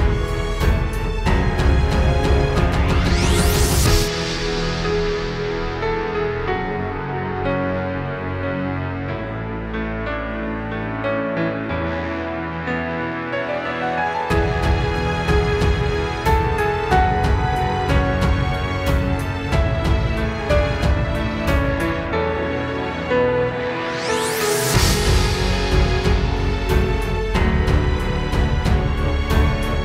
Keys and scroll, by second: 19.2 space, 19.4 space, 20.2 super+z, 26.6 space, 29.5 space.